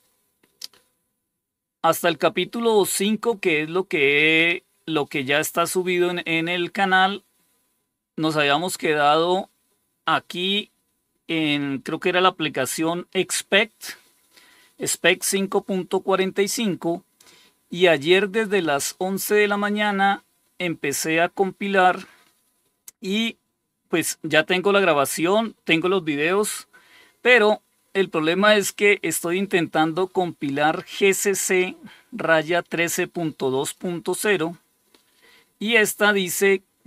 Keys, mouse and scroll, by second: 0.5 scroll down 1, 7.1 scroll down 1, 20.0 scroll down 1, 28.7 scroll down 1, 33.5 click.